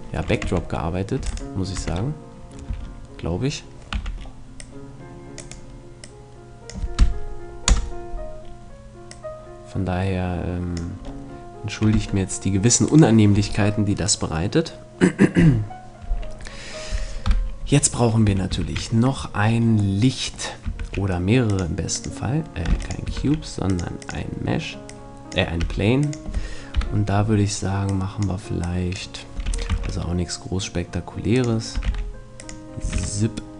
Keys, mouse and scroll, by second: 0.5 Tab, 1.2 Tab, 1.3-3.3 right drag, 1.8 Tab, 2.7 a, 3.9 c, 6.1-7.7 drag, 7.7 KP_0, 8.5-10.7 middle drag, 9.1-11.1 drag, 11.1 middle click, 11.1 right click, 11.9 click, 11.9 Tab, 12.1 middle click, 12.9-14.7 right drag, 17.3 KP_7, 18.3 a, 20.0 middle click, 20.8 shift+a, 22.7 x, 23.2 shift+a, 24.9-25.9 drag, 25.6 s, 26.8 KP_7, 28.1-29.9 drag, 29.5 r, 30.3 click, 30.4 click, 31.5-33.5 drag, 31.7 s, 32.8 s.